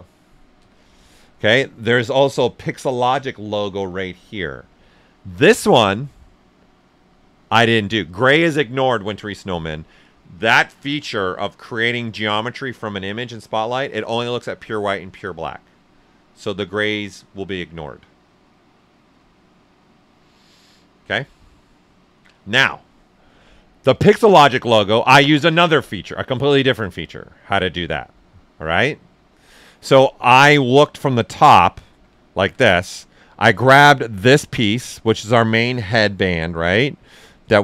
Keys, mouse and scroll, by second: 0.5 z, 29.8 right click, 32.3 alt+click, 32.9 shift+f, 33.9-36.8 drag, 36.8-37.6 drag.